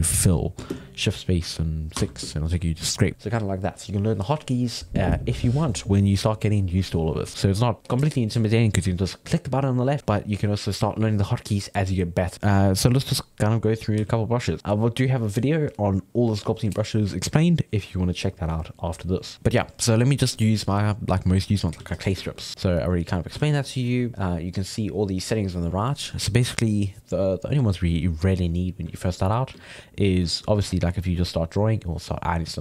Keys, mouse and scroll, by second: 0.7 shift+space, 7.3-9.9 middle drag, 12.4-14.0 middle drag, 14.0 f, 19.3-21.0 middle drag, 21.0 click, 21.8 f, 22.2 ctrl+middle click, 22.6 click, 23.4 ctrl+z, 24.7-30.6 middle drag, 30.6 f, 31.1-32.6 drag.